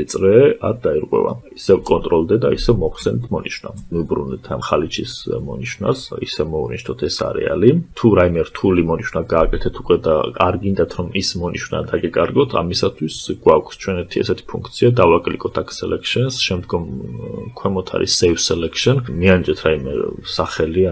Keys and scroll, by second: 1.3 ctrl+d.